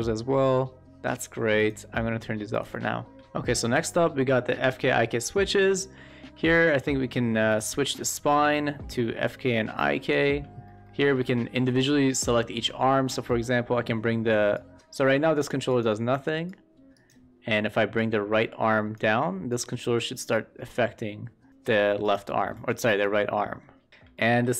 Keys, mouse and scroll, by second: 1.6 click, 3.1 q, 6.0 shift+middle click, 6.7 shift+middle click, 7.6-10.1 drag, 10.6-10.9 shift+middle drag, 11.2 middle click, 11.5-12.0 shift+middle drag, 12.7 shift+middle drag, 13.3 middle click, 14.5-14.8 drag, 15.0 middle click, 15.6 click, 16.1 e, 16.4 click, 18.0 click, 19.4-21.5 drag, 22.5 e, 22.9-23.9 drag, 24.1 shift+middle drag.